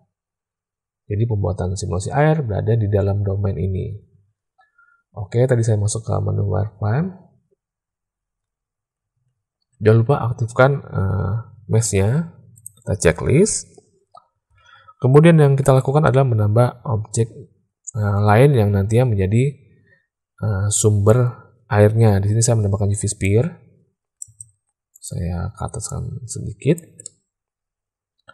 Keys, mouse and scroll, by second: 14.5 alt+a, 15.5 shift+a, 24.2 shift+space, 25.8 click, 27.0-28.3 drag.